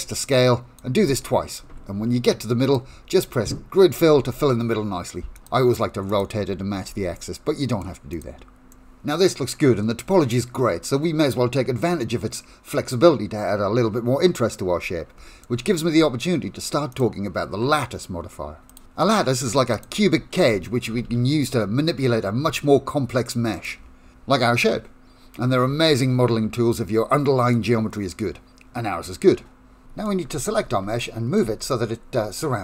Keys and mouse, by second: 0.8 e, 1.7 q, 5.4 click, 7.2 middle click, 8.2 click, 8.8-15.5 middle drag, 16.9 alt+click, 18.7-19.9 right drag, 20.9 g, 26.2 Tab, 27.6-30.1 middle drag, 30.3 Tab, 31.0 shift+middle click, 31.8 middle click.